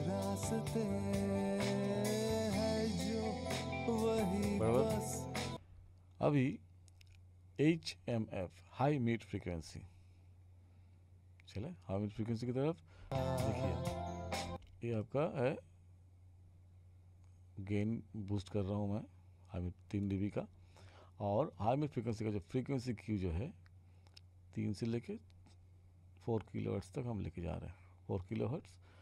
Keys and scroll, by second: 5.5 space, 13.0 space, 14.5 space.